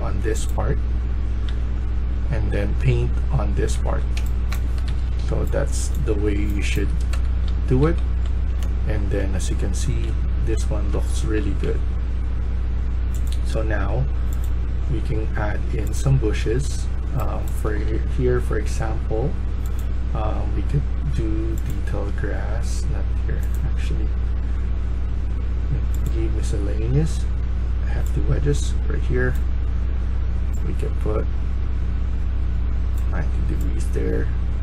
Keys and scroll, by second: 1.4-5.3 typing, 6.6 Escape, 7.0-11.3 typing, 16.3-17.2 a, 17.2 s, 27.3 a, 27.8 a, 34.3-34.6 typing.